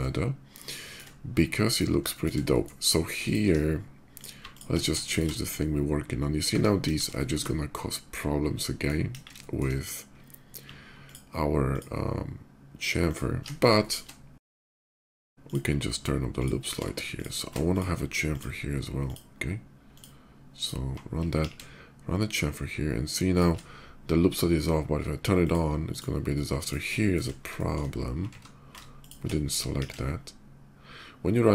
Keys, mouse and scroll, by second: 0.5 shift+middle click, 1.0 shift+middle click, 1.9 shift+middle click, 2.2 shift+middle click, 2.9 shift+click, 3.2 Tab, 3.9 click, 4.2 alt+click, 4.7 shift+middle click, 6.1 middle click, 6.4 middle click, 6.6 KP_5, 6.9 middle click, 8.4 shift+middle click, 8.7 KP_5, 9.2 middle click, 10.0 middle click, 10.8 alt+shift+click, 11.5 alt+shift+click, 12.8 alt+shift+click, 13.2 alt+shift+middle click, 13.5 shift+middle click, 13.8 middle click, 14.2 ctrl+z, 14.7 ctrl+right click, 14.9 ctrl+shift+z, 15.1 ctrl+click, 15.3 ctrl+click, 16.1 ctrl+click, 16.8 shift+click, 17.4 ctrl+click, 18.1 ctrl+click, 18.8 ctrl+click, 19.7 ctrl+click, 20.3 ctrl+click, 21.1 ctrl+b, 21.8 ctrl+shift+b, 23.1 shift+click, 25.0 shift+click, 25.6 shift+click, 26.1 middle click, 26.6 shift+middle click, 27.3 shift+middle click, 28.0 ctrl+z, 28.6 ctrl+shift+z, 28.8 click, 29.5 ctrl+b.